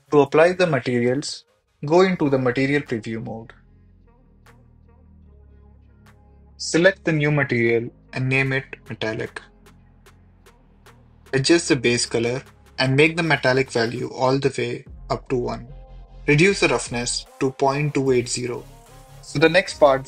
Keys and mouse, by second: 2.5 click, 5.9 click, 6.3-8.7 drag, 9.7-11.4 shift+drag, 10.3 l, 11.8 click, 12.8-13.5 drag, 14.6 ctrl+s, 15.8-17.2 drag, 17.3 click.